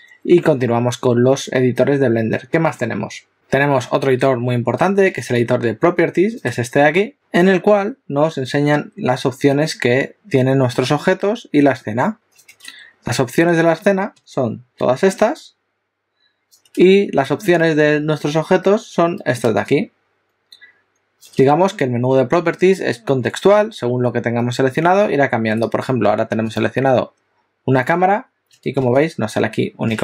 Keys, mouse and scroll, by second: 26.6 click.